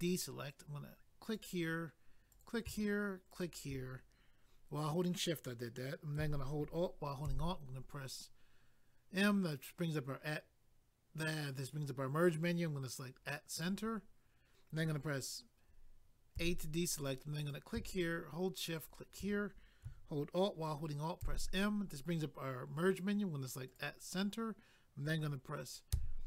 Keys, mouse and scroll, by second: 1.2 click, 2.3 click, 3.3 shift+click, 7.2 alt+m, 13.5 click, 13.6 click, 17.4 click, 17.5 click, 18.8 shift+click, 18.9 shift+click, 21.2 alt+m, 23.7 click.